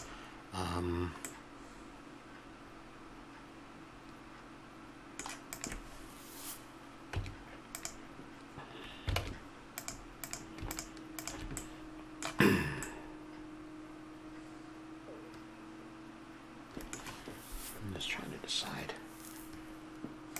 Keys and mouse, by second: 0.0-5.5 middle drag, 5.5-7.2 drag, 7.2 Tab, 9.2 ctrl+Tab, 10.2-11.7 drag, 11.7-13.0 middle drag, 14.0-16.3 middle drag.